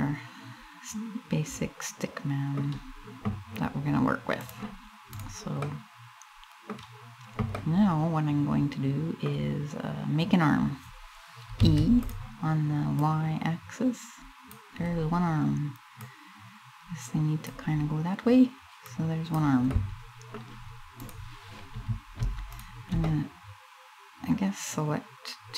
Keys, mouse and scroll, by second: 4.0 click, 4.8 right click, 5.3 middle click, 7.2 middle click, 11.2 e, 11.7 click, 12.6 click, 14.5 scroll down 4, 15.6 click, 17.5 scroll up 2, 18.5 click, 19.4 middle click, 20.7 right click, 22.1 shift+right click, 22.7 middle click, 23.8 middle click.